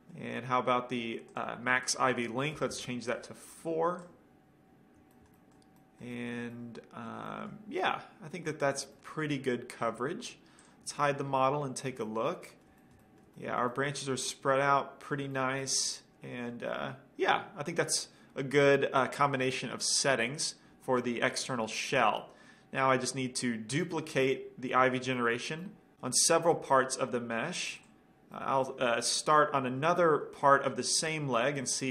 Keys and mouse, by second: 0.6-1.2 drag, 1.4-3.3 drag, 4.5 click, 5.3-6.1 middle drag, 6.6-8.7 middle drag, 10.8-12.5 drag, 10.8-12.7 middle drag, 15.3-17.6 middle drag, 21.1-23.3 middle drag, 23.3-24.9 drag, 24.9-27.0 middle drag.